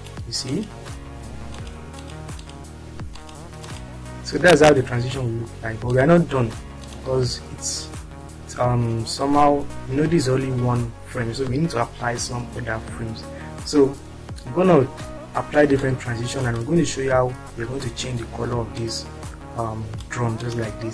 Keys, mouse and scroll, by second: 1.2 click, 4.2 click, 6.8 click, 14.2-14.6 scroll down 2, 16.0 click, 18.7-19.9 drag.